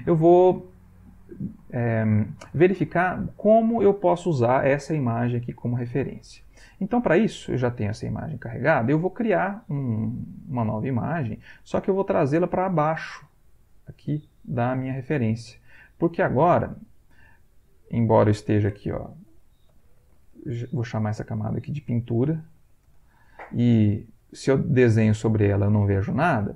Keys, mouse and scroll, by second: 11.2 click, 13.3 click, 18.0 click, 19.4-22.6 typing, 21.0 Home, 22.2 End, 22.9 Return, 24.2 click, 24.9 click, 26.0 click.